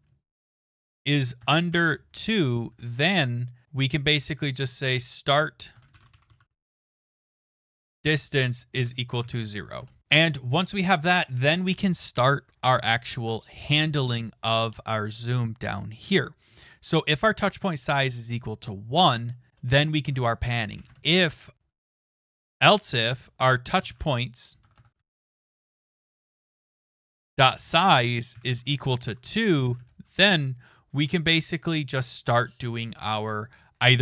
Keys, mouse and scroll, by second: 0.5 BackSpace, 0.6 BackSpace, 1.4 BackSpace, 4.4-10.0 typing, 9.8 Return, 10.0 click, 10.5-11.2 scroll down 1, 13.8 scroll down 2, 14.0-15.6 scroll, 17.8 click, 19.0 Return, 19.5 Return, 19.7-25.8 typing, 27.1 Tab, 29.1 typing, 30.1-30.8 typing.